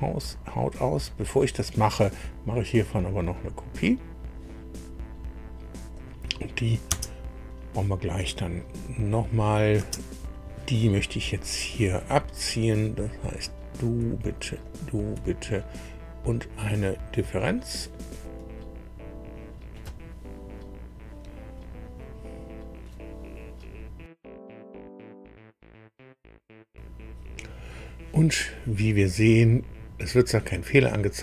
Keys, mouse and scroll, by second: 0.2 click, 1.2 click, 3.3 click, 5.1 scroll down 2, 5.9 click, 6.9 space, 9.3 click, 9.8 space, 11.7 click, 13.1 click, 14.6 shift+click, 17.4 click, 29.0-29.4 scroll down 2, 31.0-31.2 scroll up 2.